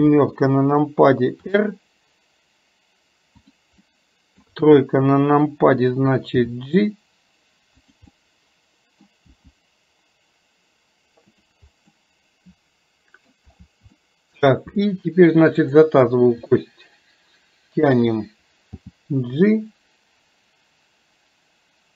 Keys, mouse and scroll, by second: 3.9 middle click, 8.1 scroll up 1, 8.3 middle click, 9.0 scroll down 1, 11.9-13.4 middle drag, 14.1-14.8 shift+middle drag, 15.7 click, 16.7-18.0 middle drag.